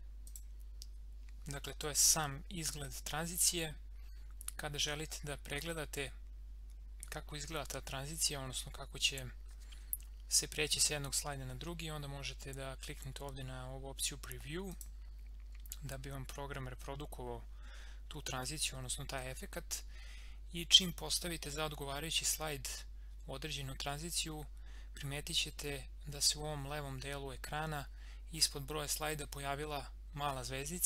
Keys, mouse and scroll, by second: 14.7 click.